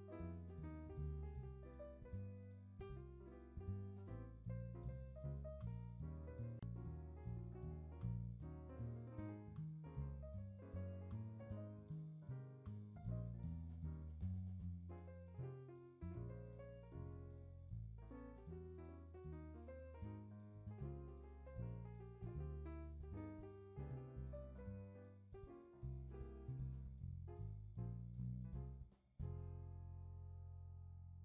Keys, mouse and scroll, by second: 1.4 k, 9.1-9.5 shift+middle drag, 9.5 k, 15.3-17.4 shift+middle drag, 18.5 ctrl+z, 19.1 k, 24.9-25.9 shift+middle drag, 25.9 k.